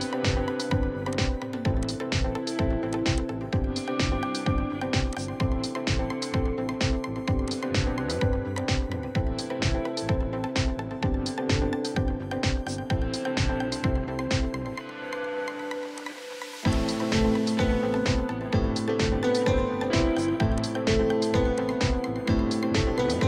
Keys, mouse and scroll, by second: 3.2 double click, 9.0 middle click, 11.0 scroll down 1, 11.2 middle click, 12.8-13.3 scroll up 1, 13.3 middle click, 22.9 middle click.